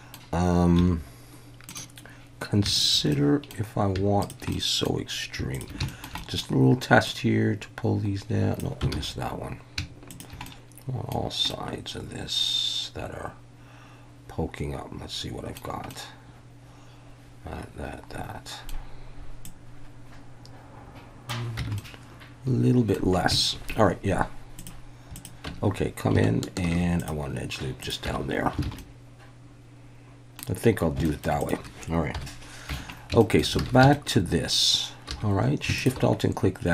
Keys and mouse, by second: 0.8 1, 2.8 shift+click, 3.1 middle click, 4.2 shift+click, 4.5 middle click, 5.5 shift+click, 5.9 shift+middle click, 6.2 middle click, 7.1-8.6 drag, 8.9 ctrl+z, 10.2 shift+drag, 10.5 middle click, 11.5-15.6 middle drag, 15.9-18.7 middle drag, 19.4-21.3 drag, 21.6 Tab, 21.8-22.9 middle drag, 22.4 click, 22.7 click, 25.4 Tab, 26.7 ctrl+r, 27.8 click, 28.1 Tab, 28.6 alt+a, 28.8-30.4 middle drag, 31.0 shift+middle click, 31.4 click, 32.1 KP_1, 32.7 Tab, 33.2 shift+middle click, 33.6 alt+a, 33.9 shift+middle click, 35.1 2.